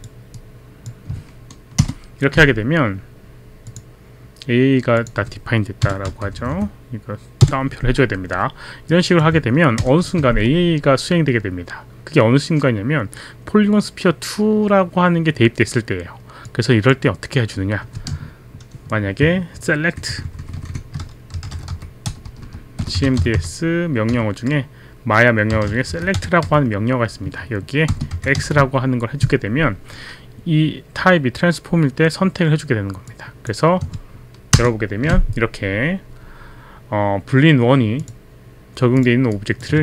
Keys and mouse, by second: 0.4 click, 1.8 ctrl+Return, 2.3 ctrl+Return, 3.7 click, 5.0 click, 6.3 Right, 8.9 click, 9.8 ctrl+Return, 16.5 click, 20.6 shift+Left, 21.1-23.8 typing, 25.3-29.0 typing, 33.1 click, 34.6 ctrl+Return, 38.0 click, 39.0 click, 39.3 click.